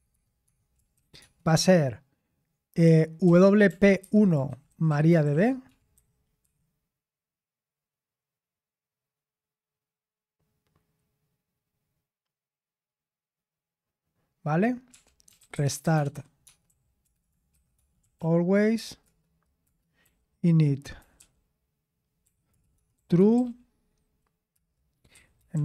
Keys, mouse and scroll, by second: 0.0-1.1 typing, 3.2-5.9 typing, 6.4 Escape, 14.6-25.6 typing.